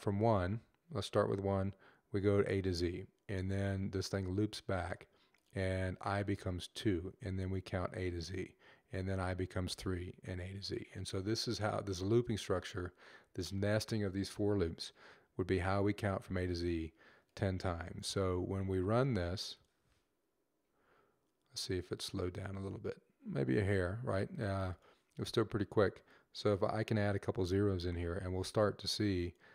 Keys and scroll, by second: 26.6 0, 29.2 typing.